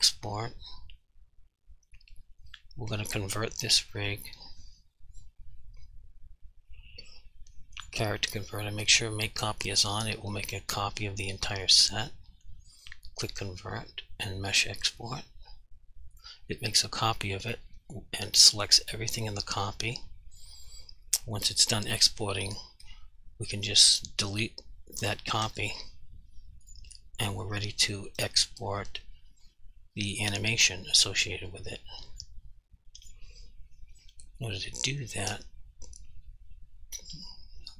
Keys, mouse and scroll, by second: 7.8 click, 10.7 g, 11.6 right click, 13.3 click, 23.1 g, 23.9 click, 25.5 Delete, 26.7 click, 31.6 click, 33.1 click.